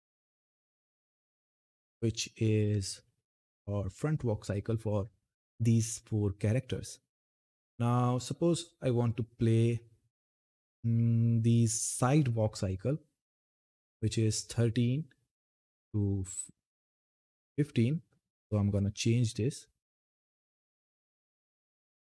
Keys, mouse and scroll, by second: 7.3-7.8 scroll down 1, 8.8-12.9 drag, 18.5-22.0 drag.